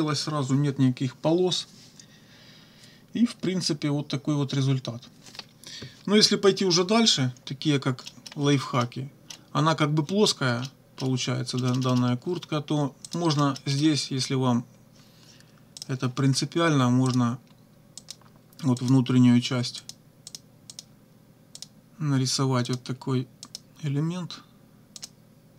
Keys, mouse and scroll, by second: 8.1 middle click, 8.8 middle click, 9.2 click, 10.7 click, 11.6 click, 13.1 click, 13.9 click, 15.8 click, 17.1 click, 18.0 click, 18.8 click, 19.8 click, 20.3 click, 20.7 click, 21.6 click, 22.7 click, 23.5 click, 25.0 click.